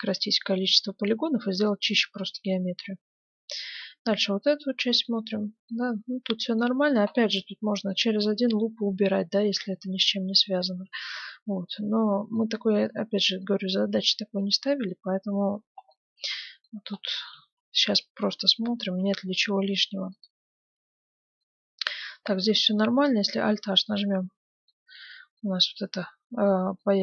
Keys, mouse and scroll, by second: 2.2-3.7 right drag, 2.6 Tab, 3.7-9.0 middle drag, 10.3-11.8 scroll down 1, 10.7 Tab, 11.8-18.4 middle drag, 17.3 Tab, 18.7 Tab, 19.4-21.2 middle drag, 20.4-21.8 right drag, 20.7 Tab, 21.4-23.4 middle drag, 23.4 alt+h, 23.8 middle click, 24.8 Tab.